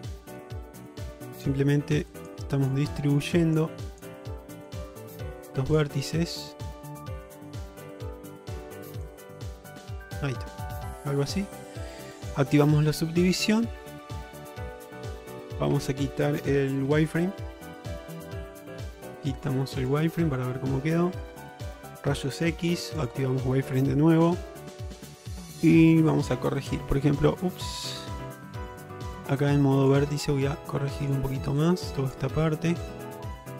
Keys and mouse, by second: 0.2 click, 0.7 click, 1.3 click, 2.2 click, 2.6 click, 3.1 click, 3.4 click, 3.9 click, 4.6 click, 5.2 click, 5.7 click, 6.2 click, 7.1 click, 7.6 click, 8.0 click, 8.5 click, 9.5 click, 9.8 click, 10.7 shift+middle click, 12.4 click, 13.1-14.7 middle drag, 15.8 Tab, 17.6 ctrl+Tab, 18.9 q, 19.9 click, 20.6 shift+middle drag, 21.4 alt+z, 22.7 q, 24.7 shift+middle drag, 26.8 1, 28.0 ctrl+z, 28.4 Tab, 29.2 click, 30.6 click, 31.7 click, 32.8 click.